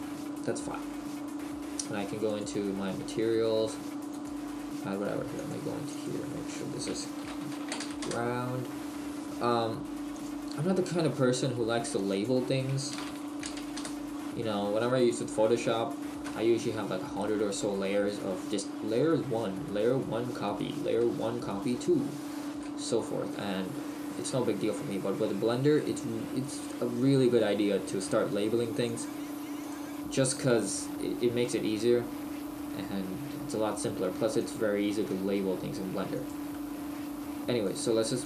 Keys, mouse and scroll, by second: 2.3 middle click, 2.3 click, 4.1 click, 10.1 click, 12.1 click, 15.6 middle click, 17.7 middle click, 22.6 shift+middle click, 23.4 middle click, 28.9 click, 31.4 middle click, 34.4 click.